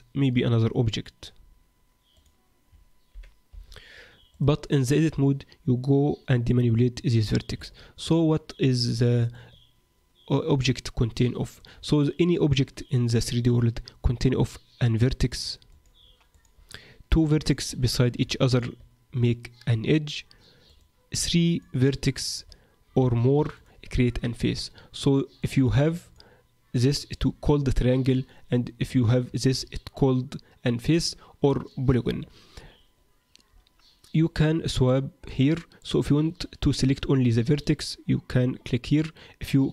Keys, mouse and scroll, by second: 3.1 g, 4.8 click, 7.5 Tab, 8.1-8.7 scroll up 2, 8.7-9.1 scroll up 3, 9.3 middle click, 14.8 click, 15.7 click, 17.3 click, 18.5 shift+click, 20.7 click, 21.5 click, 22.3 shift+click, 23.5 click, 25.3 click, 26.0 shift+click, 34.7 click, 35.3 click, 37.5 click.